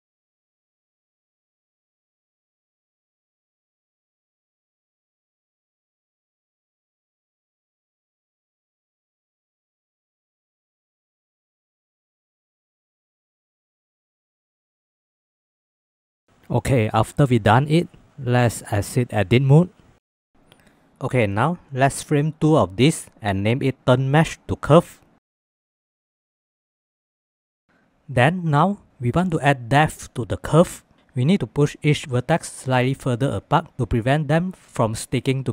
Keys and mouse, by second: 0.0-10.2 typing, 1.1 Tab, 1.8 shift+Tab, 3.6 click, 3.7 shift+middle click, 4.4 Tab, 4.6 shift+click, 4.8 click, 5.3 ctrl+z, 5.9 click, 6.4 click, 6.8 ctrl+z, 7.1 click, 7.8 shift+middle click, 9.0 ctrl+s, 9.3 shift+middle click, 9.6 middle click, 10.6 middle click, 10.9 middle click, 11.1 shift+middle click, 12.1 e, 13.9 e, 15.4 click, 16.4 g, 18.1 Tab, 18.6 shift+middle click, 19.5 shift+middle click, 20.3 ctrl+s, 21.2 click, 22.0 ctrl+j, 23.2 F2, 28.2 ctrl+s.